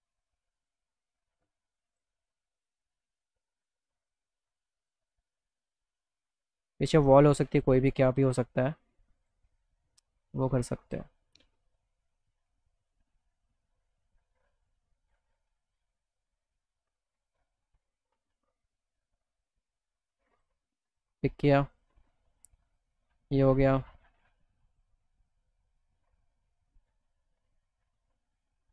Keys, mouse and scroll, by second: 0.4 middle click, 0.7 middle click, 2.0 click, 2.3 middle click, 3.1 click, 6.1 alt+middle click, 7.0 middle click, 7.4 middle click, 7.6 alt+middle click, 9.2 click, 17.2 click, 19.0 click, 20.4 click, 20.9 click, 21.8 click, 22.7 click, 24.7 click, 25.3 click.